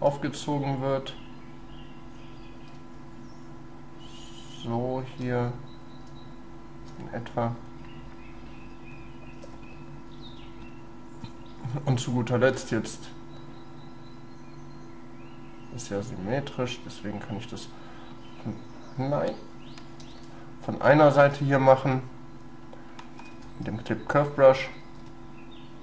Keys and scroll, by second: 2.8 shift+space, 6.1 shift+space, 20.0 ctrl+z, 21.3 ctrl+y, 23.3 space, 25.1 shift+space.